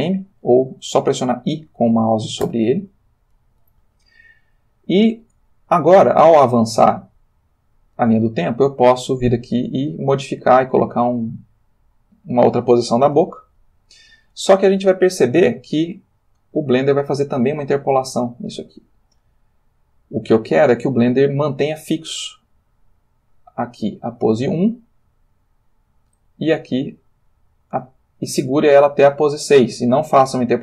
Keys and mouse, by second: 2.4 i, 5.6-8.4 drag, 9.9 click, 10.8 middle click, 14.8-26.4 drag, 27.0 click, 29.7-30.6 drag.